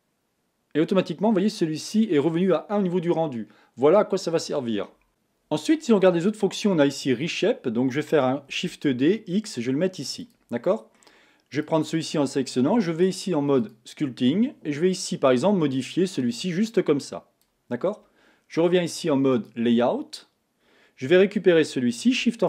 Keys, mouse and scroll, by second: 5.1 Tab, 9.2 shift+d, 10.6 middle click, 11.6 click, 13.9-20.2 drag.